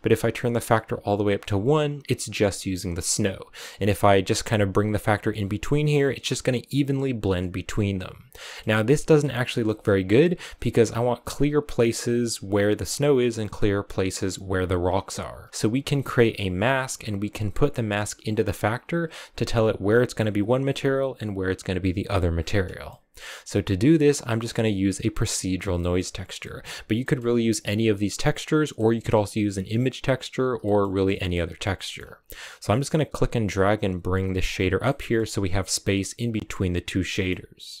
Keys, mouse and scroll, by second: 0.0-8.2 drag, 8.2-10.5 middle drag, 10.5-10.9 scroll up 2, 14.7-15.4 scroll down 5, 15.4 middle click, 15.5-16.3 scroll up 1, 16.3-18.4 scroll up 1, 22.2-22.8 scroll down 8, 22.8-25.4 middle drag, 25.4 scroll down 2, 25.7 middle click, 26.5-26.9 scroll up 2, 26.9 middle click, 27.4 click, 28.0 click, 28.3 scroll down 2, 28.5-31.4 middle drag, 31.4-31.7 scroll down 1, 31.7-33.1 middle drag, 33.1-34.7 drag, 34.7 middle click, 35.1-35.9 scroll up 4, 35.9-37.8 middle drag.